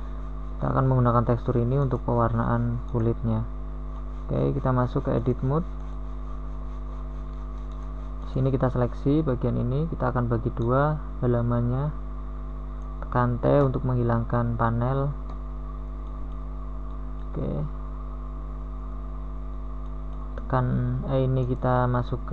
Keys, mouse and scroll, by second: 9.8 middle click, 10.4 middle click, 12.1 t, 13.8 t, 17.5 KP_1.